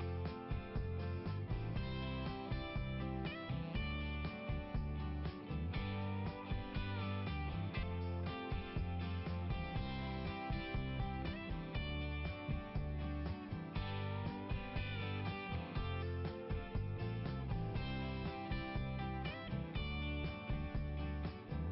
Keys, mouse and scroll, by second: 1.4-1.7 scroll down 1, 4.5 scroll down 1, 5.9 click, 9.9 click, 12.4-13.2 scroll up 1, 15.1-15.4 scroll up 1, 17.4-18.1 scroll up 1, 20.5 scroll down 1.